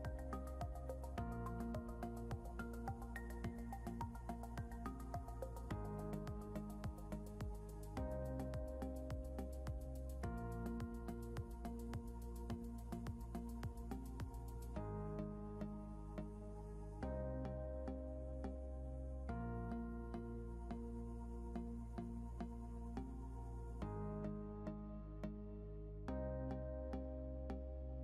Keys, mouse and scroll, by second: 2.0 click, 3.1 ctrl+z, 4.3 click, 9.9 click, 11.5 ctrl+z, 12.8 click, 17.8 right click, 21.6 click, 23.0 shift+click, 23.7 typing, 24.8 click.